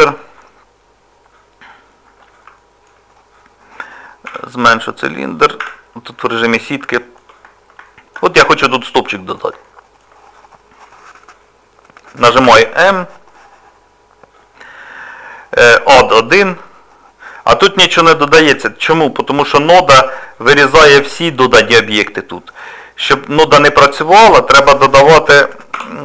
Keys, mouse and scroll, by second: 0.2 middle click, 5.6 z, 6.1 middle click, 7.8 shift+middle click, 8.7 middle click, 9.7 middle click, 12.5 m, 18.9 middle click.